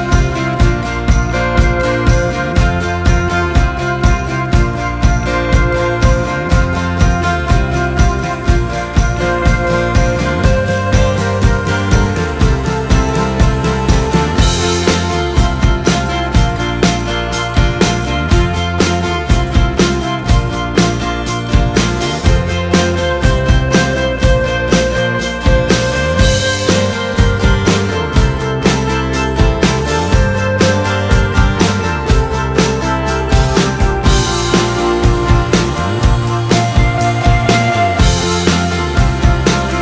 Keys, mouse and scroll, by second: 0.4-8.1 drag, 10.8-20.0 drag, 26.4 click, 31.9-39.8 drag.